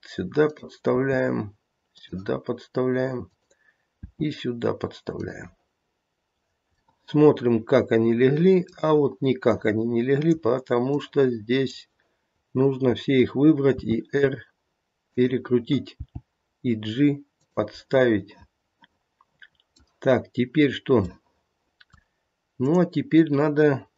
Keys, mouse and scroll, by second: 0.4 click, 0.9 e, 3.2 click, 4.0 e, 6.8 middle click, 7.1 middle click, 7.6 middle click, 7.7 middle click, 8.5 middle click, 9.5 click, 10.9 click, 13.8 r, 16.0 g, 17.9 middle click, 21.1 middle click, 22.5 click.